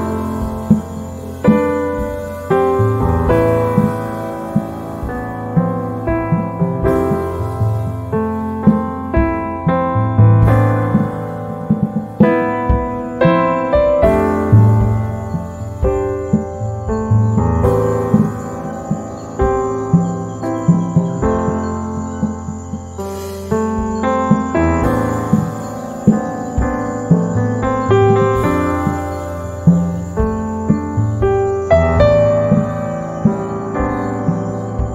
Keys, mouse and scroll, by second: 1.2 Down, 5.5-7.8 drag, 7.8 Down, 12.7 h, 12.9 click, 13.3 space, 14.3-16.3 drag, 16.3 h, 16.4 click, 16.7 space, 17.4 Right, 20.5-23.3 drag, 23.3 z, 23.4 click, 23.8 space, 25.0 click, 26.1 z, 26.1 right click, 27.0 space, 29.8-32.8 drag, 32.8 right click.